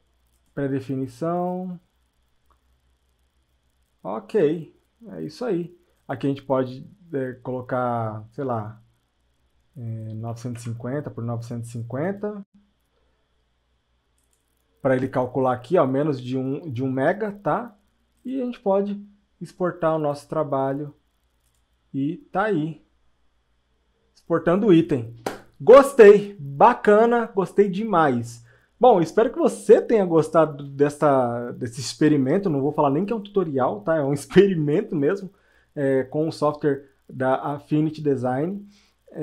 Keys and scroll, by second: 10.3 KP_9.